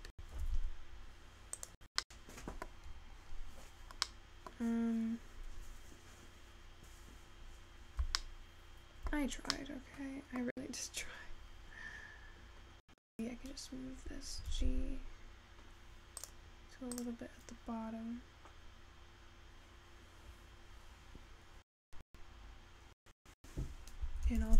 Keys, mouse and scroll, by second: 0.7 g, 9.1-24.5 shift+middle drag.